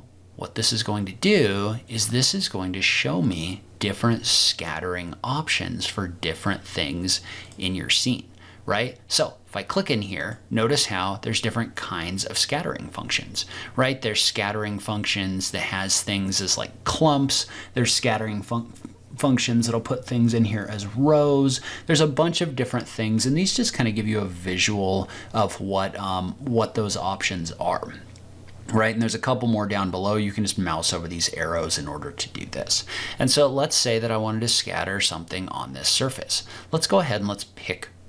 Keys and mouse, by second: 1.9 click, 3.4-7.5 drag, 32.6-38.0 middle drag.